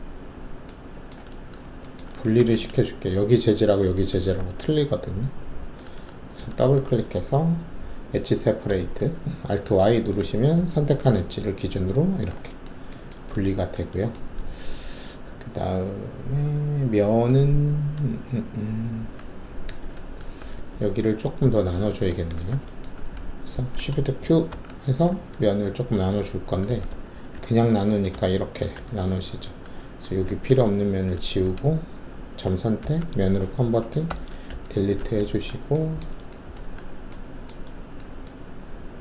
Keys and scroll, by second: 2.3 alt+2, 4.3 alt+2, 8.6 alt+y, 20.3 alt+2, 22.3 alt+w, 22.9 alt+`, 24.5 shift+q, 27.3 ctrl+alt+z, 28.1 ctrl+z, 30.2 alt+1, 32.8 ctrl+3, 34.0 ctrl+`, 34.9 alt+`.